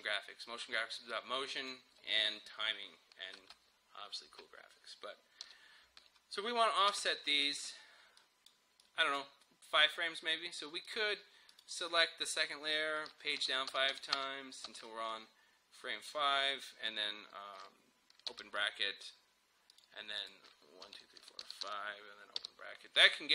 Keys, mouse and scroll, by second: 1.1-3.4 drag, 3.4 space, 5.5 Home, 6.9 space, 8.2-10.9 drag, 13.4 Page_Down, 18.3 [, 19.7 click, 20.9 Page_Down, 22.4 [, 23.1-23.3 drag.